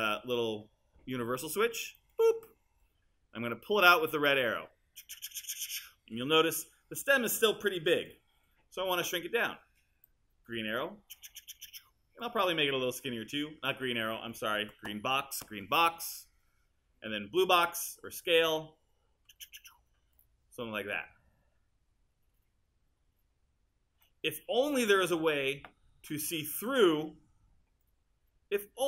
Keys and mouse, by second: 17.4-20.5 drag, 24.1 click.